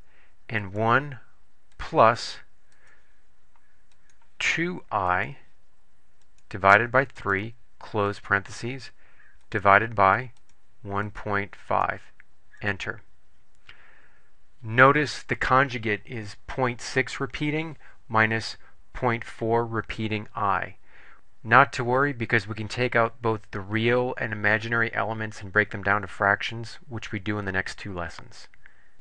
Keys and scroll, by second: 0.8 1, 2.9 2, 5.3 ., 6.4 /, 7.3 3, 8.3 ), 9.6 /, 10.5 1, 11.2 ., 11.8 5, 12.7 Return.